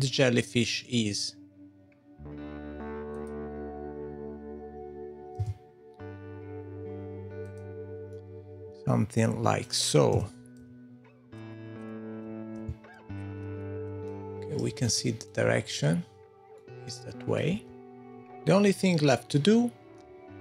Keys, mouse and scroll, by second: 3.1 click, 5.3 g, 8.1 middle click, 10.1 g, 11.5 Tab, 11.7-12.1 scroll up 5, 11.9 click, 11.9 middle click, 12.2 Tab, 12.7 f, 12.7 g, 13.2 Tab, 13.3 middle click, 13.5 Tab, 13.6 middle click, 14.4 scroll up 3, 14.8 shift+middle click, 16.6 middle click, 17.5 Tab, 18.0-18.3 scroll down 2.